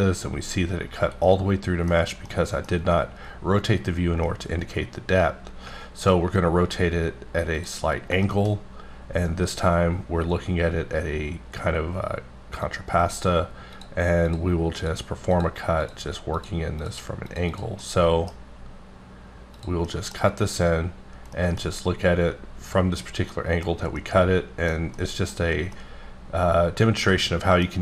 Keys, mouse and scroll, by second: 1.2 middle click, 1.9-2.6 scroll down 2, 2.6 middle click, 4.2 middle click, 7.6 click, 8.2 shift+middle click, 8.5-8.8 scroll up 2, 9.3-10.2 scroll down 2, 11.2-11.5 scroll up 1, 12.6 click, 13.7 click, 14.8 click, 15.3 click, 16.3 click, 16.8 click, 17.5 double click, 17.8 middle click, 19.8 middle click, 21.3 middle click, 21.5 scroll down 1, 23.3 middle click, 24.0 middle click, 24.9 middle click, 25.6 scroll up 1, 25.6-27.8 middle drag.